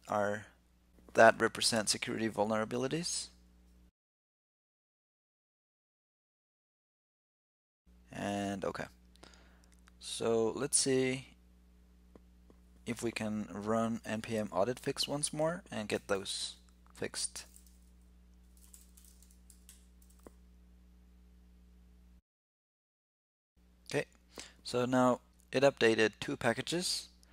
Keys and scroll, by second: 15.7 ctrl+l.